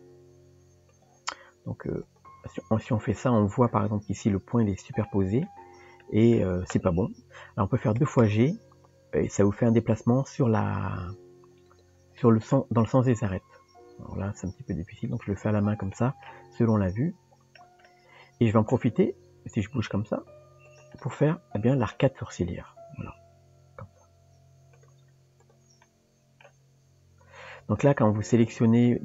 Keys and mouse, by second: 2.1 click, 5.0 click, 6.0 click, 12.2 click, 16.0 click, 16.8 click, 17.9 middle click, 21.0 middle click, 25.4 click, 25.8 middle click, 28.3 click.